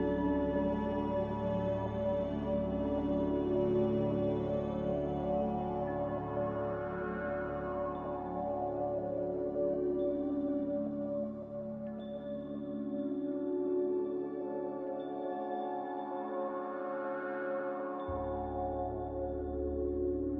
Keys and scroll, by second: 5.1 c, 12.5 z, 17.6 a.